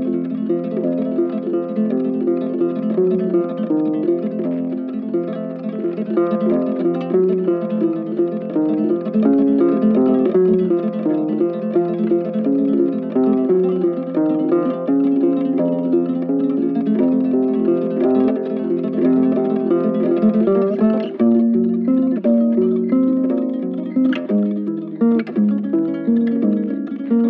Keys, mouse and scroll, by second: 2.4 double click, 5.4 shift+click, 6.1 shift+right click, 7.9 ctrl+z, 17.6 right click, 19.1 ctrl+z, 19.2 alt+click, 20.9 alt+click, 21.3 alt+click, 24.1 ctrl+z, 24.3 alt+click.